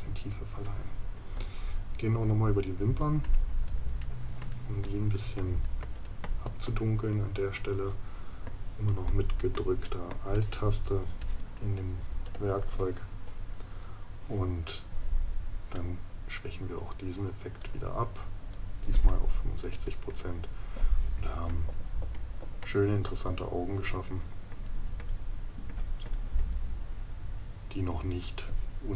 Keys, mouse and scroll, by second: 4.0 right click, 21.7 ctrl+KP_Subtract.